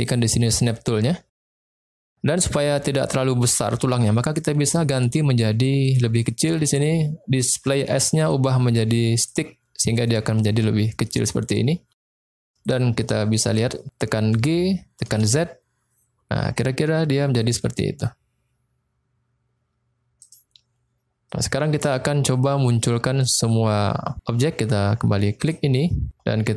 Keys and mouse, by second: 0.5 click, 3.3 middle click, 5.9 click, 8.2-9.3 drag, 9.8 middle click, 11.0-11.4 middle drag, 12.0 drag, 12.5 click, 12.9 middle click, 13.7 middle click, 14.3 g, 15.1 z, 20.2 click, 21.2 middle click, 25.4 click.